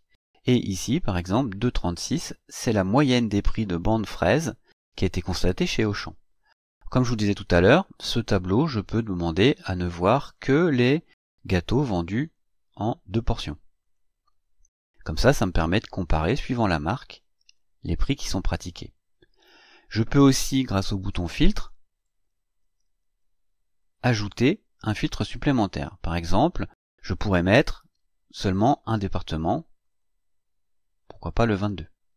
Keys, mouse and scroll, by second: 8.9 click, 10.3 click, 11.0 click, 12.2 click, 13.8 click, 17.5-18.8 drag, 21.5 click, 23.8-24.5 drag, 25.7 click, 28.6 click, 29.9 click, 31.0 click.